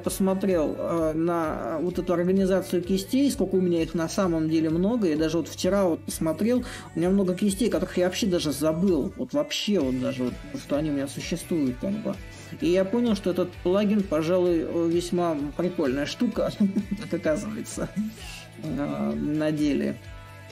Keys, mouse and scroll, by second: 0.0-1.9 drag, 1.9-6.8 middle drag, 12.3 middle click, 13.6 middle click, 18.5-20.5 drag.